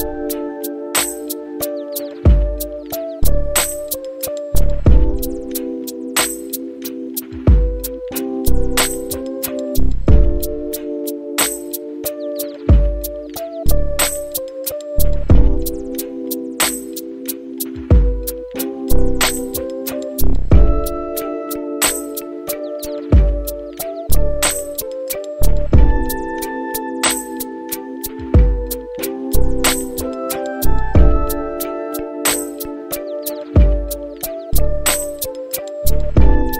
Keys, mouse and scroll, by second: 5.5-11.7 drag, 12.5 middle click, 13.3 space, 20.6 click, 22.7 click, 24.7 click, 32.3 space.